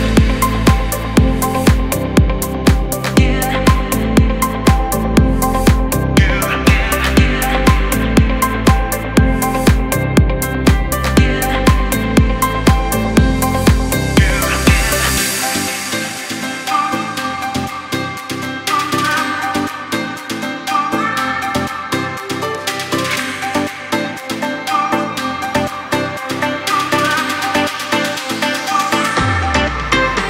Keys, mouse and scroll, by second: 4.0-16.9 drag, 19.2 click, 21.8 space, 22.2 click, 22.3 space, 22.7 alt+scroll up 1, 23.9 space, 24.1 click, 24.4 space, 24.8 alt+scroll up 1, 25.4 space, 25.6 click, 25.9 space, 27.8 click.